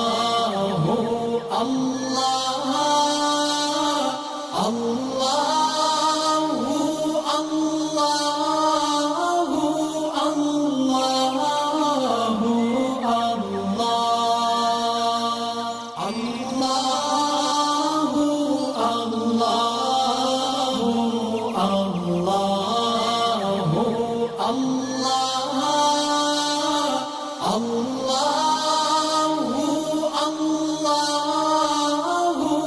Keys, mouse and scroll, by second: 0.6 click, 2.8 click, 3.4 alt+scroll up 1, 5.1 click, 5.5 alt+scroll down 1, 7.0 click, 9.6 alt+scroll down 1, 10.0 space, 10.1 click, 12.5 space, 12.5-13.6 click, 13.9-14.8 alt+drag, 14.4 right click, 15.5 click, 19.0 alt+scroll up 1, 19.3-20.8 drag, 21.2 space, 21.3 click, 22.8 alt+scroll down 1, 23.1 space, 23.2 click, 25.8 click, 29.2 click, 32.4 click.